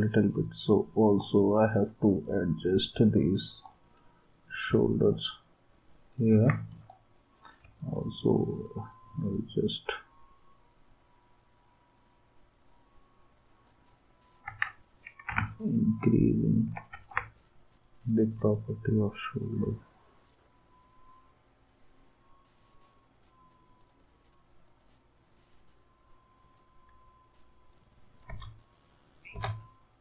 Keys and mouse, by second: 6.3 ctrl+s, 14.4 ctrl+s, 16.9 ctrl+s, 28.3 space.